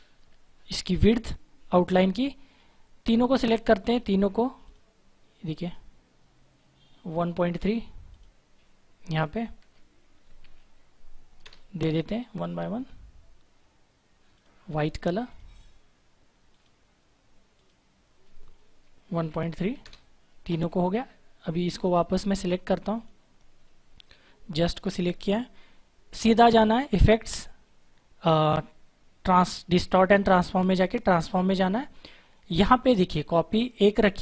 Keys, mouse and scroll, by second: 3.0 click, 11.3 Return, 12.7 click, 19.7 Return, 21.6 click, 26.8 click, 30.8 click, 33.8-34.2 scroll up 1.